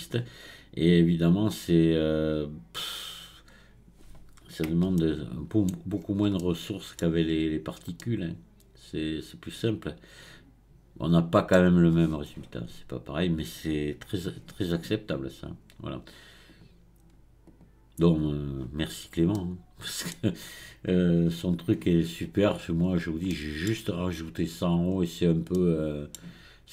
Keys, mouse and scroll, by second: 0.9-2.3 scroll up 1, 2.3-3.4 drag, 3.4 scroll down 2, 5.0-5.9 shift+middle drag, 5.9-6.4 scroll up 4, 6.4-7.3 shift+middle drag, 7.3 scroll up 1, 8.0-11.0 middle drag, 11.7-14.7 scroll down 1, 16.5-17.6 drag, 18.8-19.3 scroll down 4, 19.3-20.4 middle drag, 20.4-23.3 scroll up 3, 23.3-24.9 middle drag, 24.9-25.5 scroll up 2, 25.5-26.7 middle drag.